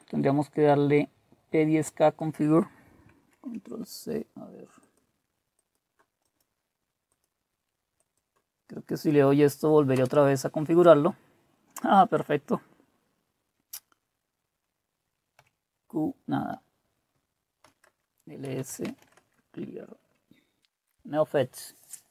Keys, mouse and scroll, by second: 3.3 ctrl+c, 4.8 click, 5.6 click, 7.1 click, 8.0 click, 9.1 Right, 9.9 Return, 15.4 typing, 17.1-21.4 typing, 17.8 Return.